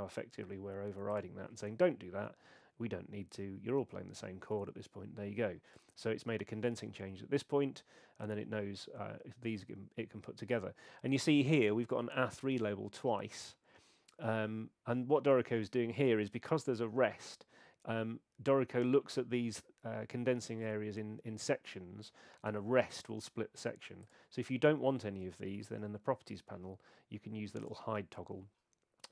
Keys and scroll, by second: 25.5 super+8.